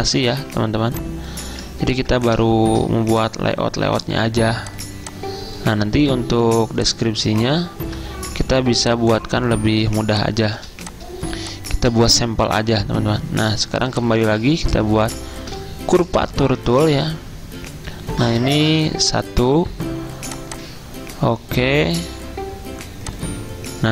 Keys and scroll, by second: 2.0 ctrl+2, 6.6 ctrl+2, 8.4 ctrl+g, 10.8 z.